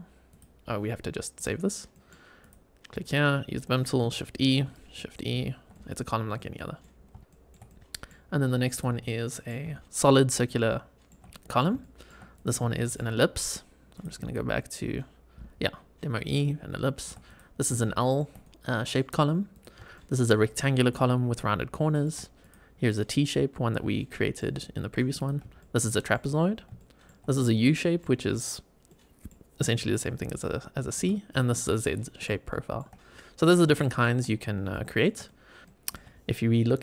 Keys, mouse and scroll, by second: 0.2 click, 1.3 click, 1.8 middle click, 2.3 click, 3.0 shift+right click, 4.0 shift+e, 4.6 shift+right click, 4.7 shift+click, 5.2 shift+e, 5.6-6.0 middle drag, 6.5 middle drag, 6.9 scroll down 2, 7.2 shift+middle click, 7.6-8.0 middle drag, 8.2 scroll up 2, 8.7 click, 8.9 scroll up 1, 9.0-9.4 middle drag, 9.6 shift+middle click, 10.0 shift+middle click, 10.6-11.0 shift+middle drag, 11.2 middle drag, 11.7 shift+middle drag, 12.3 click, 12.6 shift+middle click, 13.8 click, 16.3-17.0 shift+middle drag, 17.2 click, 17.7-18.1 shift+middle drag, 18.3-18.8 middle drag, 19.5 click, 19.8-20.2 shift+middle drag, 21.6-22.0 shift+middle drag, 22.3 click, 23.9-24.3 shift+middle drag, 25.1 click, 25.5-26.1 shift+middle drag, 26.7 shift+middle drag, 27.3 click, 27.7 middle click, 28.8 middle click, 30.4-30.8 shift+middle drag, 31.2 click, 31.8-32.1 middle drag, 32.4 shift+middle click, 32.9-33.5 scroll down 4, 33.7 shift+middle drag, 34.2 scroll up 2, 34.6 shift+middle click, 35.2-35.9 middle drag, 35.6 scroll down 1.